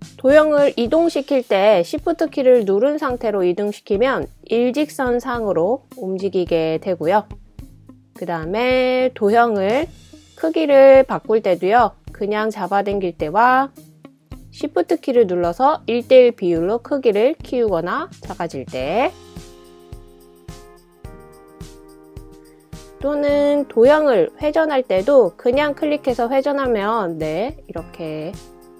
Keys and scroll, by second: 2.3 typing.